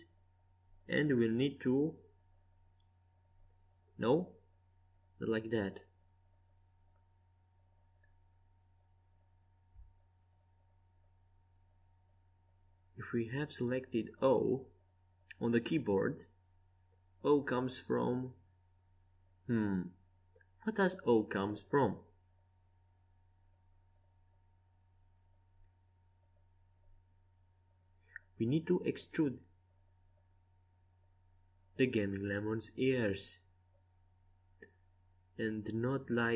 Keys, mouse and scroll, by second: 0.7-3.2 middle drag, 3.2-5.0 drag, 5.9 Escape, 7.1 ctrl+z, 8.8 o, 11.1-13.0 drag, 14.3-17.2 middle drag, 16.7 o, 17.8 o, 18.9 ctrl+z, 19.6 ctrl+z, 20.2 ctrl+z, 22.0 o, 23.8-25.5 drag, 24.7 Escape, 25.3 ctrl+z, 26.3 ctrl+z, 27.8 o, 28.8 o, 29.3 o, 30.3 o, 32.6 g.